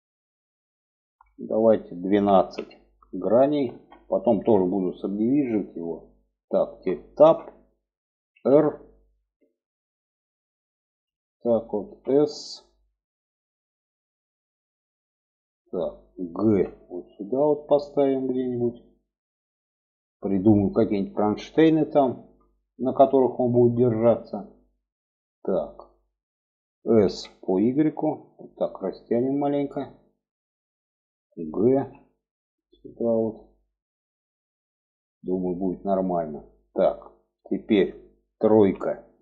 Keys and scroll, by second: 6.5 Tab, 7.7 r, 11.2 s, 15.8 g, 26.4 s, 31.1 g, 37.9 3.